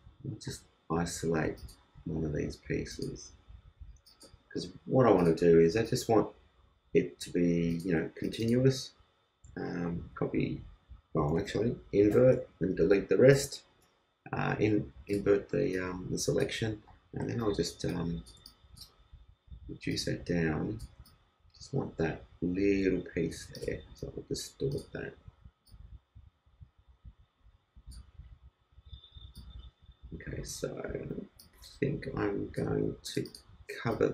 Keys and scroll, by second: 10.2 super+c, 12.1 shift+super+i, 12.7 shift+super+BackSpace, 13.4 super+BackSpace, 13.9 super+d, 17.4 super+t, 17.8 super+space.